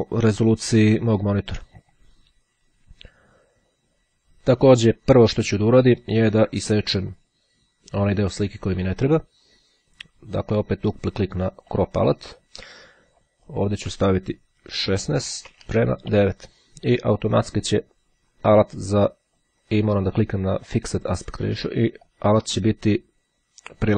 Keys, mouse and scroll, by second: 7.2 click, 11.0-12.5 drag, 13.3 click, 13.9 KP_1, 14.1 KP_6, 15.5 shift+;, 15.7 KP_9, 17.8-20.0 drag, 20.7 click, 22.2-23.9 drag.